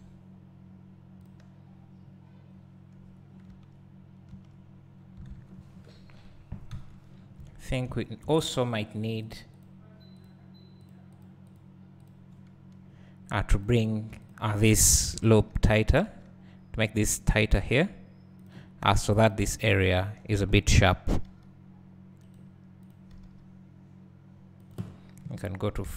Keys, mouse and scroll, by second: 1.4-3.7 drag, 3.7 Tab, 4.9-6.4 scroll down 3, 6.4-7.0 scroll down 1, 7.1-7.6 scroll up 2, 7.6 1, 7.9 `, 9.4-11.6 drag, 12.0 click, 15.3 g, 18.5 click, 20.1 shift+click, 21.2 g, 22.4 right click, 22.9 click, 23.2 g, 24.7 click, 25.4 KP_1.